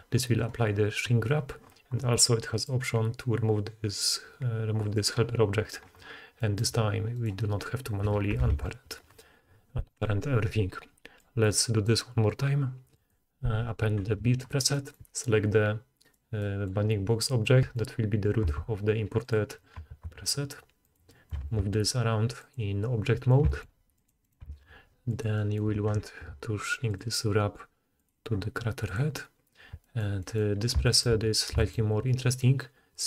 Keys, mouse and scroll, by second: 4.9-7.0 middle drag, 7.0 click, 7.2-11.1 middle drag, 8.4 alt+a, 11.1-12.5 drag, 16.0 click, 18.6 click, 18.6 s, 19.5-22.7 middle drag, 20.0 s, 21.5 g, 22.8-26.9 middle drag, 23.6 g, 24.6 g, 26.9-28.1 drag, 28.1-33.0 middle drag, 33.0 click.